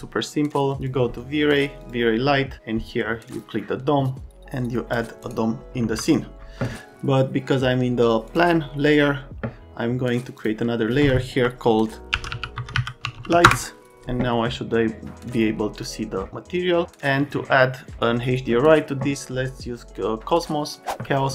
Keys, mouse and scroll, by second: 0.7 click, 1.8 click, 3.3 click, 4.3 click, 5.8 F3, 8.3 middle click, 10.4 middle click, 11.9-13.7 typing, 15.8 click.